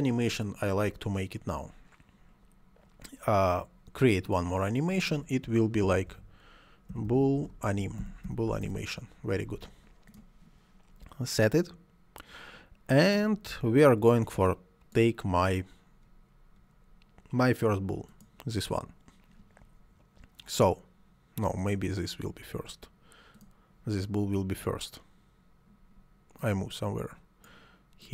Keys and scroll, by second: 5.8-8.7 typing.